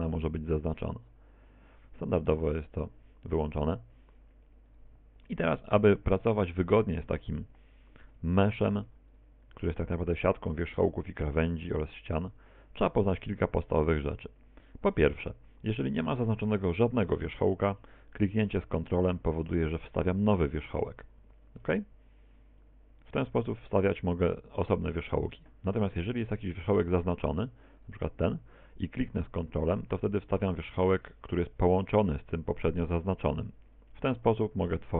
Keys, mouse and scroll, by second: 2.6 click, 4.2 right click, 4.7 right click, 5.3 right click, 6.7 click, 7.9 right click, 8.6 right click, 9.2 shift+right click, 9.6 right click, 13.4 right click, 15.2 a, 19.6 ctrl+click, 21.4 a, 22.7 ctrl+click, 25.3 a, 27.9 right click, 31.8 ctrl+click, 34.3 ctrl+click, 34.8 ctrl+click.